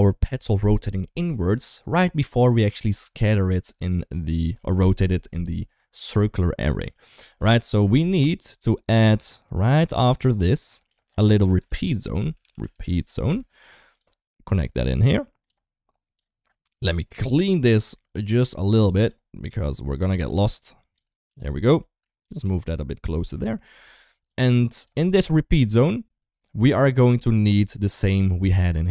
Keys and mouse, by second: 2.8 middle click, 7.2 middle click, 8.2 middle click, 8.9-10.1 drag, 10.3 click, 11.3 shift+a, 14.5 click, 16.0 click, 16.2 click, 17.1 middle click, 17.6-18.9 drag, 19.5-20.0 drag, 20.2-20.8 shift+drag, 21.1 g, 21.8 middle click, 22.0 g, 23.3 shift+middle click, 24.1 click, 25.0 shift+middle click, 27.2 shift+middle click, 27.7 shift+middle click.